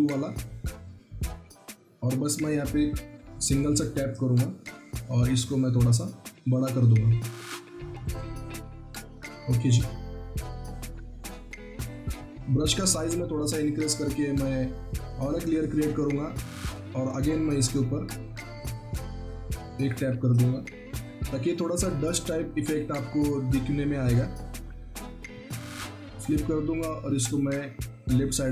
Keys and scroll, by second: 4.5 ctrl+t, 5.1 ctrl+alt+t, 20.7 ctrl+t.